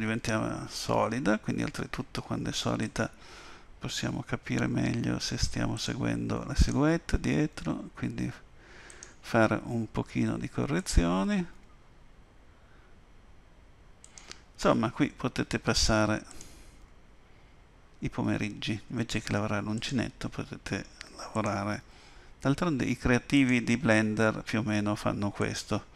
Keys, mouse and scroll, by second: 2.8 click, 4.1 g, 6.6 click, 7.5 g, 10.8 click, 11.5 g, 16.3 click, 18.2 g, 21.3 click, 21.8 g, 25.4 click.